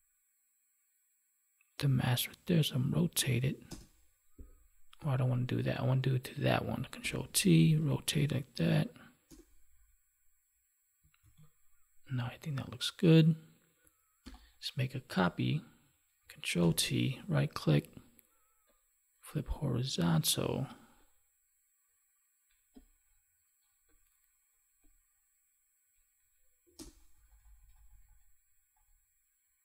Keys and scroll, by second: 5.0 ctrl+z, 7.0 ctrl+t, 9.7 Down, 11.2 ctrl+s, 14.2 ctrl+j, 16.6 ctrl+t.